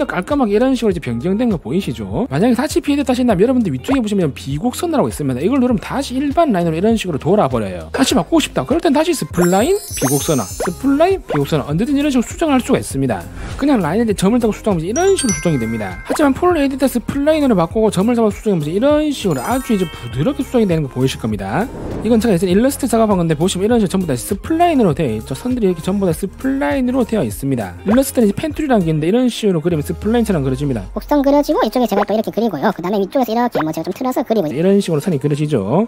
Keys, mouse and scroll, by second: 0.1 scroll up 1, 1.0 click, 1.3 scroll up 1, 1.7 scroll down 1, 3.8 scroll down 1, 4.1 middle click, 6.2 click, 9.5 click, 10.4 click, 11.1 click, 11.8 click, 14.2 click, 17.6 click, 18.6 click, 23.8 click, 24.3 scroll up 2, 25.1 space, 25.4 click, 26.2 alt+middle click, 26.5 click, 26.8 space, 27.0 click, 27.4 click, 29.8-31.3 drag, 31.8 click, 32.8 space, 32.9 click, 33.9 click.